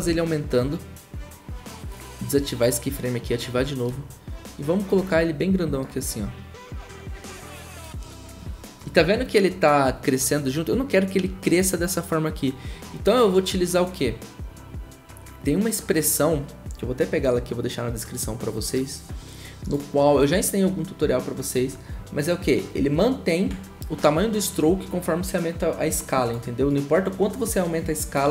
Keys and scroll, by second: 0.0 s.